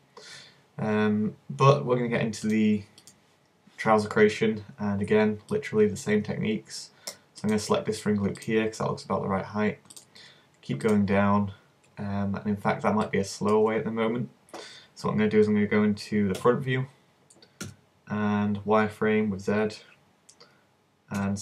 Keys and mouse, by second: 3.2-4.3 drag, 16.4 KP_1, 17.7 z, 21.3 c.